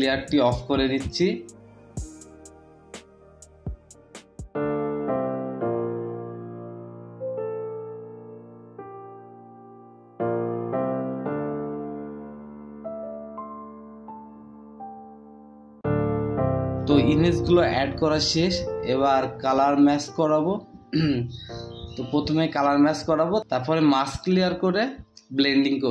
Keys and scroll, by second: 2.6 ctrl+t, 4.3 Return, 7.2 typing, 12.4 Return, 16.5 Return, 18.0 ctrl+b, 24.5 Return, 24.8 Return.